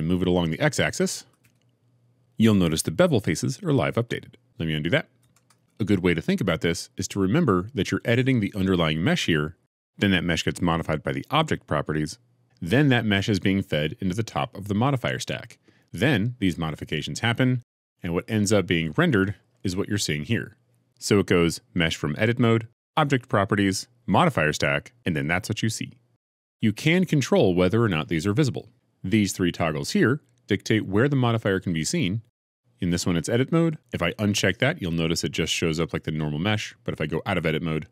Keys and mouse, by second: 1.3 g, 1.3 x, 5.1 ctrl+z, 37.8 Tab.